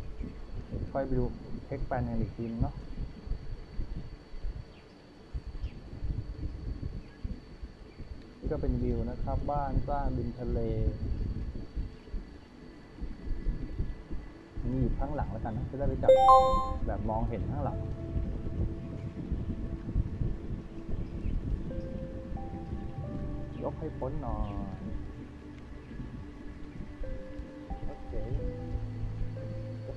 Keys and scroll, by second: 1.0 w, 3.7 d, 8.2 w, 11.8 d, 12.7 w, 14.9 d, 22.5-23.4 typing, 25.7 w, 27.2 w, 28.8 d.